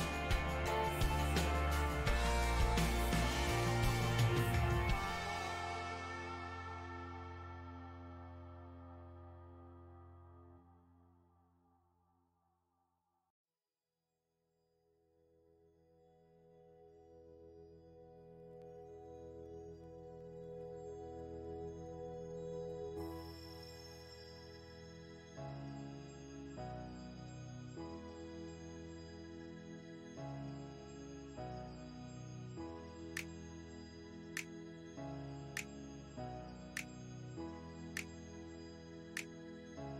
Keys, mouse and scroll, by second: 2.1 ctrl+click, 2.7 middle click, 3.3 ctrl+click, 4.0-5.1 middle drag, 5.1 ctrl+i, 6.2 middle click, 6.9 g, 7.3 middle click, 7.8 f, 8.9-12.4 drag, 12.4-16.3 middle drag, 16.3 alt+m, 17.4-27.9 middle drag, 28.9-32.1 middle drag, 32.1 f, 33.3 shift+click, 34.1 middle click, 35.1 shift+c, 35.7 f, 36.6-39.6 ctrl+drag, 39.6 middle click.